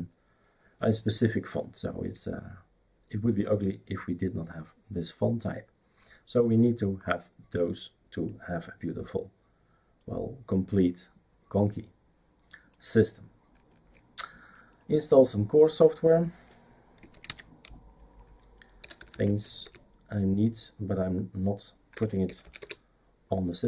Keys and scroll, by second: 17.1 typing, 18.5-19.6 typing, 21.7-22.9 typing.